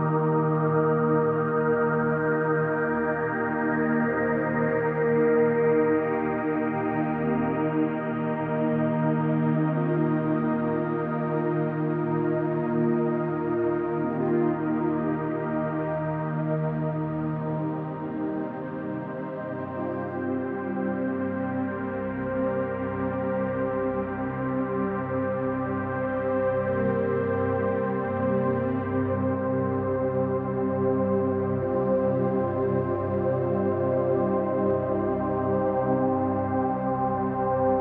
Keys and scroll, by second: 24.9 Escape, 26.5 `.